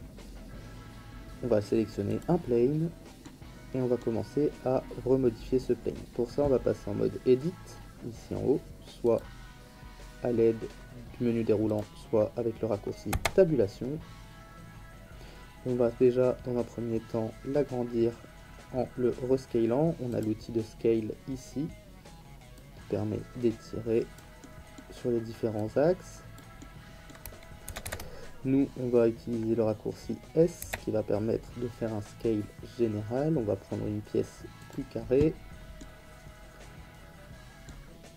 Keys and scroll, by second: 13.1 Tab, 27.7 ctrl+z, 30.6 s.